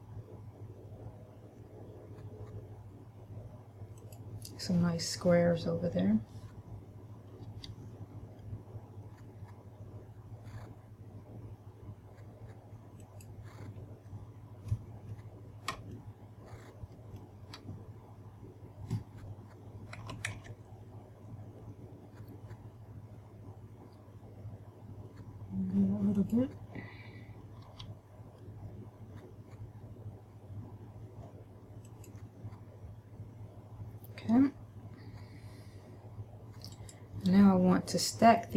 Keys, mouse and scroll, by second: 4.4 click, 7.7 g, 13.4 click, 14.2-15.4 scroll up 1, 16.2 shift+middle click, 20.2 s, 26.6 click, 27.8 g, 32.2 click, 36.9 right click.